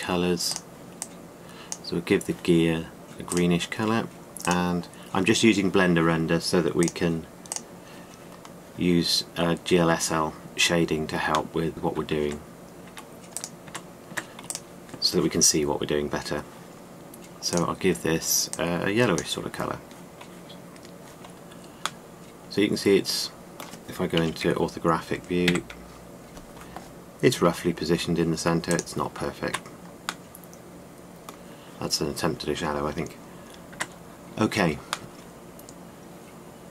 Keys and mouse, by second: 5.2 middle drag, 6.0-7.1 drag, 7.5-8.0 drag, 8.6-9.0 drag, 12.9 Tab, 13.5 Tab, 14.3 Tab, 14.8 Tab, 18.3-20.0 middle drag, 22.7-24.2 middle drag, 24.9 KP_5, 26.1 KP_1, 28.0 g, 30.1 Tab, 30.1 g, 31.1 middle click, 34.4 Tab, 35.9-36.7 middle drag.